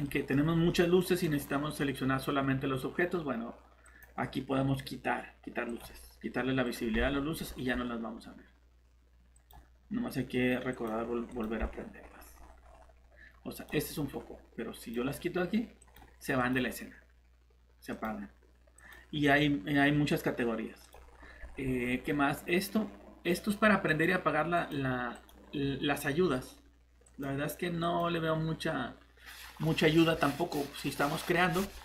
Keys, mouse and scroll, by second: 0.0 middle click, 0.4 scroll down 1, 0.7 middle click, 1.2 scroll up 1, 3.8 click, 6.5 Escape, 6.5 click, 6.9 scroll down 1, 7.6 scroll up 1, 9.3 click, 11.6 scroll down 1, 12.3 scroll up 1, 12.6 scroll down 1, 13.5 click, 21.1 scroll up 1, 23.9 click, 26.2 scroll down 1, 27.0 click.